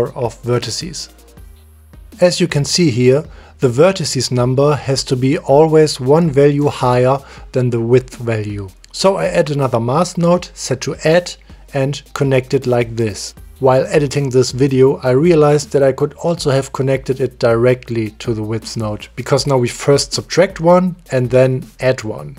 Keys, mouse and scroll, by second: 0.3 middle click, 1.7 middle click, 2.7 middle click, 3.9 click, 5.2 click, 6.2 middle click, 6.6 click, 8.3 middle click, 8.6 click, 9.3 click, 9.8 click, 10.2 middle drag, 11.7 click, 12.0 shift+d, 12.3 click, 13.2 click, 15.5 click.